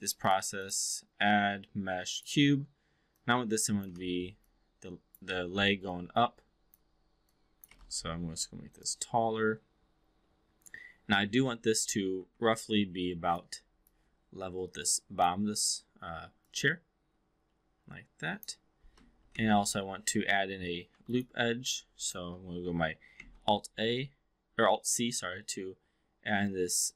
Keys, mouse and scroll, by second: 0.1 click, 0.5-2.3 drag, 3.2 click, 3.9 e, 3.9 r, 4.5 click, 5.3 w, 5.8-6.8 drag, 7.2-7.7 drag, 7.7 e, 7.8 r, 8.7-10.7 drag, 11.0 w, 12.1 x, 12.7-13.5 drag, 13.9-15.2 drag, 16.4-18.5 drag, 19.3 alt+c, 20.7 2, 21.9 click, 23.1 alt+c, 25.1-26.9 drag.